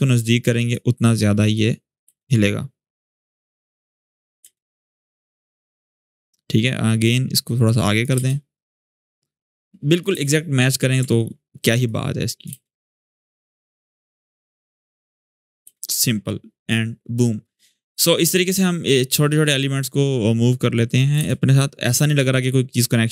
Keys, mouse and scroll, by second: 1.3-1.9 click, 1.8 space, 3.5-4.0 click, 4.2 space, 5.6-6.2 click, 6.8-8.0 click, 7.9 space, 9.1-10.0 click, 9.9 space, 10.8 alt+scroll down 1, 11.6-12.2 click, 12.2 space, 15.4 space, 17.0-21.0 drag, 20.9 space.